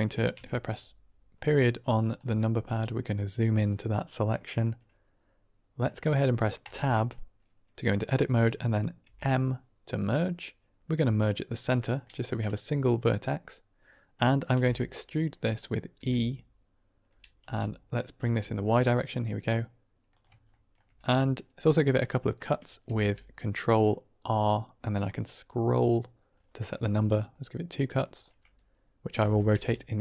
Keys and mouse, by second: 0.2 KP_Decimal, 2.3-3.2 middle drag, 3.6 middle drag, 3.8-4.5 drag, 6.5 Tab, 8.9 m, 11.7 middle click, 14.5 r, 15.5 click, 16.0 e, 17.3 c, 18.4 u, 18.7 u, 18.7 y, 20.1 click, 20.6 shift+click, 22.8 ctrl+r, 29.1 r, 29.5 x.